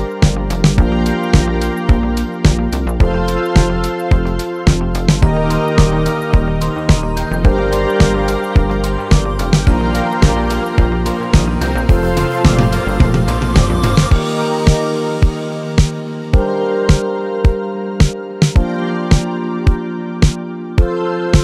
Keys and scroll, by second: 0.0-0.9 typing.